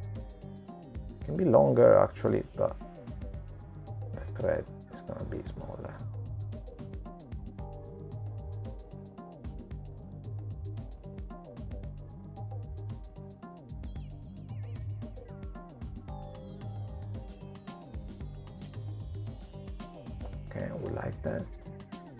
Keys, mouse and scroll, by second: 1.8 click, 6.6 click, 9.5 click, 11.9 middle click, 15.3 click, 19.6 middle click.